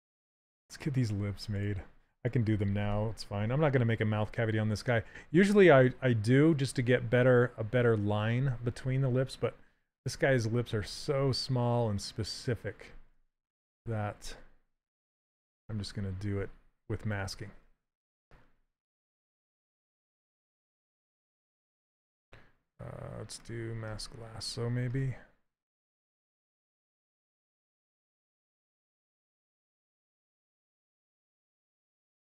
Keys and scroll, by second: 10.9 s.